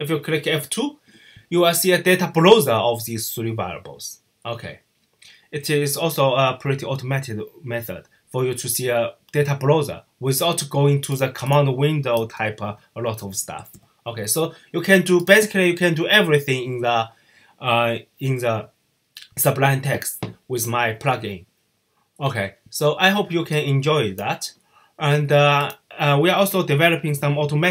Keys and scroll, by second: 11.8-13.5 typing.